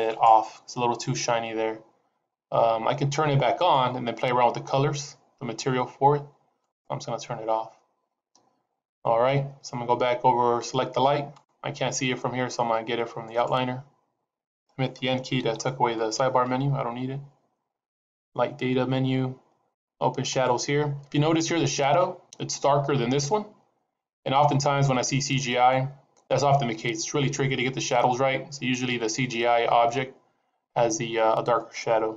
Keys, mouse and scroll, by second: 0.3 click, 3.6 click, 13.2 click, 15.3 n, 18.0 click, 20.2 click.